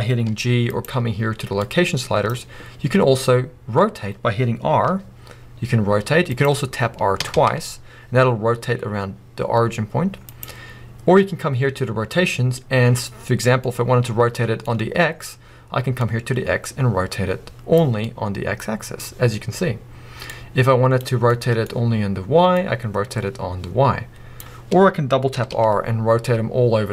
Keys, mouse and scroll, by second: 0.3 g, 0.8 right click, 1.6-6.4 drag, 4.9 r, 6.4 right click, 7.2 r, 10.4 right click, 13.2 scroll up 1, 13.6-16.0 middle drag, 16.0-18.0 drag, 17.9 scroll down 1, 18.0-20.3 middle drag, 20.3-21.3 drag, 21.3-22.5 middle drag, 22.5-26.9 drag, 25.3 r.